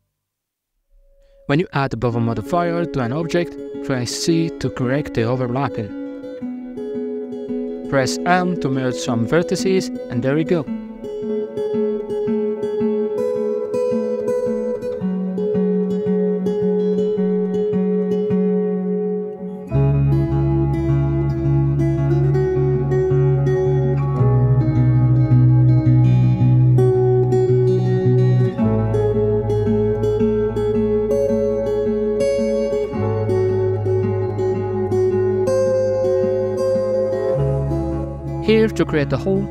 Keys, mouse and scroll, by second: 0.5 KP_Divide, 1.1 shift+middle click, 1.3 shift+right click, 2.7 ctrl+b, 8.5 m, 9.9 scroll up 2, 10.6 shift+middle click, 11.3 scroll down 1, 11.4 middle click, 11.8 Tab, 12.3 w, 15.0 Tab, 15.6 scroll up 2, 16.0 right click, 18.5 w, 19.4 w, 20.4 middle click, 20.7 a, 20.8 a, 21.3 Tab, 21.6 right click, 21.9 shift+middle click, 22.2 shift+right click, 22.5 j, 22.9-24.9 middle drag, 24.9 right click, 25.7 shift+right click, 27.0 j, 27.6 ctrl+r, 29.6 scroll up 1, 29.9 middle click, 30.2 shift+right click, 30.8 j, 31.2-32.1 middle drag, 32.1 shift+right click, 32.9 j, 33.7 right click, 34.0-34.8 middle drag, 34.8 shift+right click, 36.4 ctrl+shift+b, 38.3-39.5 middle drag.